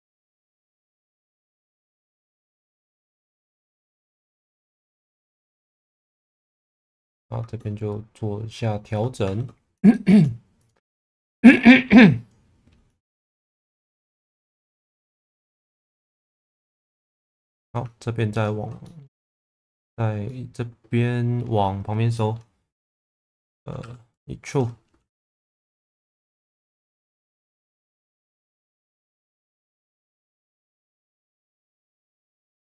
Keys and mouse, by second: 0.1 KP_0, 0.3 KP_Enter, 1.0 alt+middle click, 1.9 click, 2.7 shift+Tab, 3.2 click, 5.0 click, 6.6 click, 7.9 click, 9.2 shift+Tab, 9.9 shift+middle click, 10.6 click, 11.5 click, 13.7 click, 15.0 middle click, 16.0 2, 16.6 click, 17.5 middle click, 18.3 ctrl+click, 18.8 middle click, 19.6 middle click, 20.2-21.3 middle drag, 22.2 middle click, 23.8 e, 24.5 click, 25.6 g, 25.8 b, 26.3 click, 27.3 1, 28.5-30.5 middle drag, 31.7 g, 31.8 b.